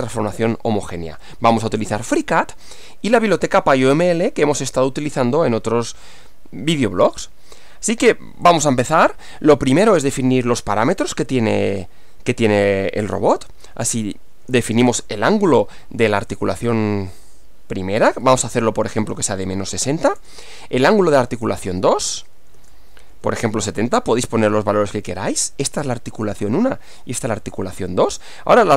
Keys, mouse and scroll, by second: 8.5 click, 11.7 click, 13.4-14.8 typing, 18.1-23.6 typing, 24.5 Return, 28.1 click.